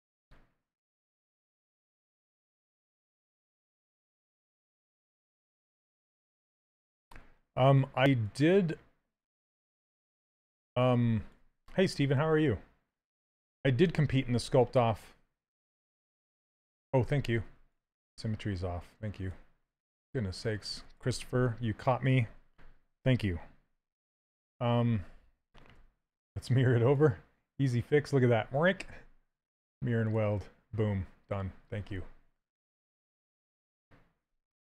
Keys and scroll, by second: 6.0 s, 16.4 ctrl+z, 21.1 s, 25.5 2.